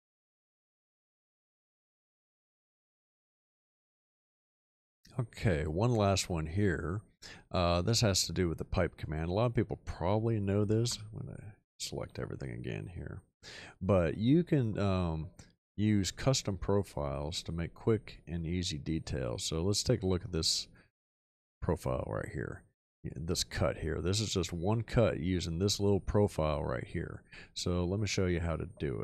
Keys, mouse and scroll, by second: 5.1-6.3 middle drag, 6.5 shift+middle click, 10.8 5.